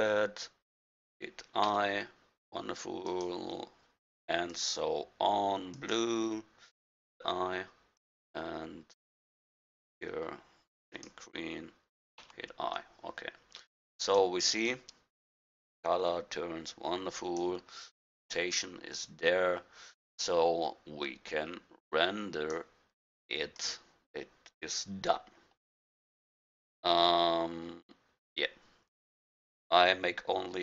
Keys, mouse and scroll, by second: 1.6 i, 3.1-7.0 drag, 7.0 i, 8.0-9.8 drag, 12.2 i, 14.1-15.0 drag, 20.1-22.0 middle drag, 22.2 middle click.